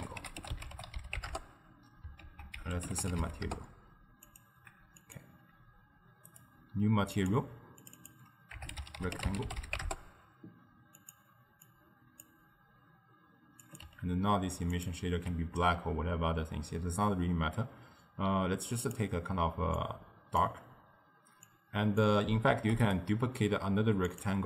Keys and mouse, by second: 2.3 ctrl+a, 5.1-6.5 drag, 7.2-8.0 drag, 8.0-14.9 drag, 18.9 click, 21.5-22.7 drag, 22.7 shift+d, 24.1 click.